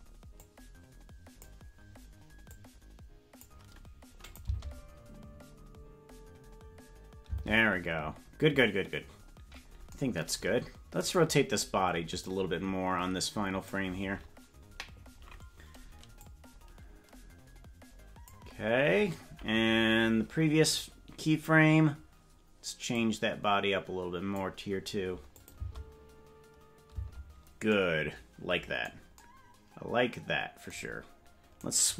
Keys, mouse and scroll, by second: 0.5-1.5 drag, 2.5 click, 4.3 click, 4.5 space, 7.3 space, 11.1 right click, 12.3-13.8 drag, 16.2-18.3 drag, 20.6 click, 22.9-24.4 drag, 25.4-26.9 drag, 25.6 space, 27.0 space, 31.7 right click.